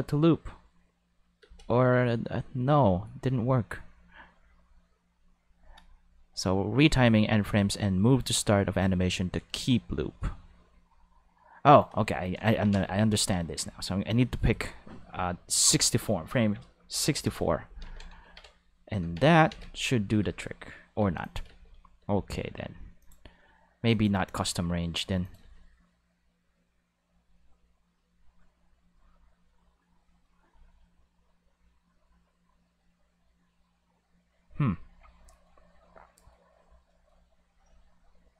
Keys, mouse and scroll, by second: 1.4 space, 11.8-12.5 drag, 15.6 click, 16.9 6, 17.1 4, 17.2 Return, 17.9 ctrl+s, 18.2 ctrl+Tab, 19.0 ctrl+Tab, 19.5 ctrl+s, 20.2 space, 21.0 space, 21.2 click, 21.5 space, 22.0 space, 23.0 click, 23.9 click, 24.2 space, 25.1 space, 25.2 click, 25.4 space, 34.5 space, 35.3-36.3 middle drag, 36.9-37.3 middle drag, 37.3 space.